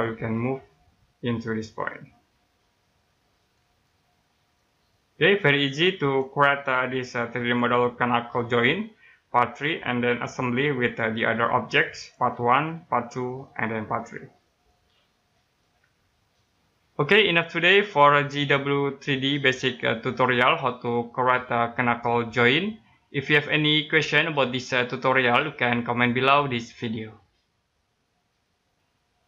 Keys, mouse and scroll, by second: 3.8 right click, 7.4-7.8 scroll up 1, 8.5 right click, 29.2 alt+Num_Lock.